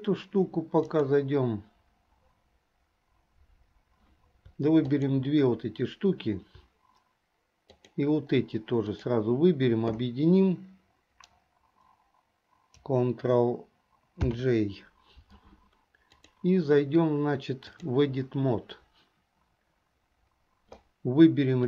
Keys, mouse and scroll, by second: 0.9-4.2 drag, 4.9 shift+click, 7.8 shift+click, 8.9 shift+click, 14.3 ctrl+j, 16.2-18.1 drag.